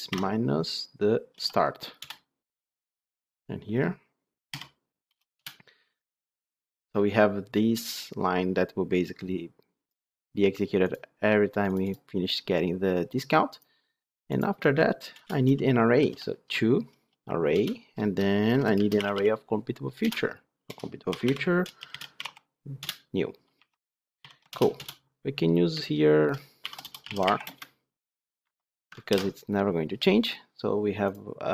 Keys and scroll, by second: 1.9 Return, 17.5 Return, 24.4 alt+Return, 28.3 Escape, 29.0 ctrl+alt+l.